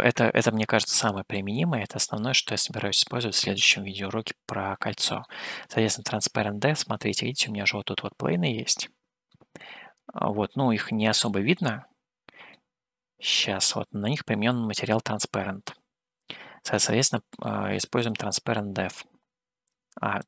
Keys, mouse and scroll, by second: 1.3 click, 4.0 scroll down 1, 5.4-9.5 middle drag, 10.9 click, 11.5-12.5 middle drag, 13.3-17.3 middle drag, 18.1 click.